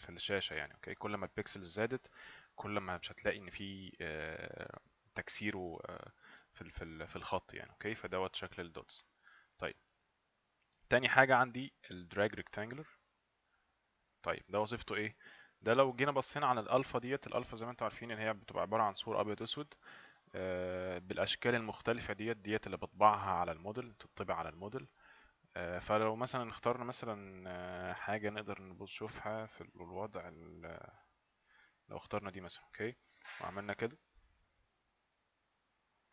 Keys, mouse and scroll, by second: 9.6 click, 16.0 click, 31.9 click, 33.9 click.